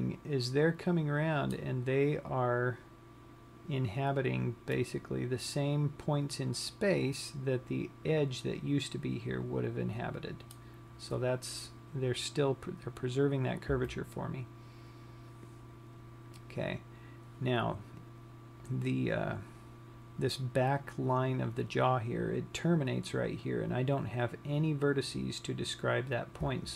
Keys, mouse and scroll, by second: 5.4 middle click, 14.3 KP_3, 17.4-18.4 scroll down 1, 24.9-26.7 scroll up 5.